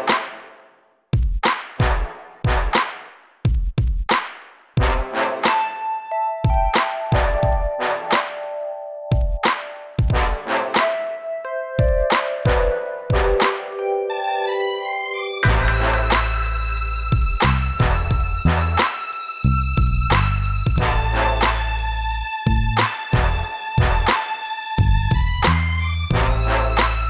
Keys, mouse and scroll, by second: 0.8 click, 5.6 click, 5.7 click, 8.6 click, 8.7 click, 13.7 Return, 16.0 click, 16.6 click, 17.1 right click, 18.1 click, 18.9 click, 21.1 click, 26.6 click.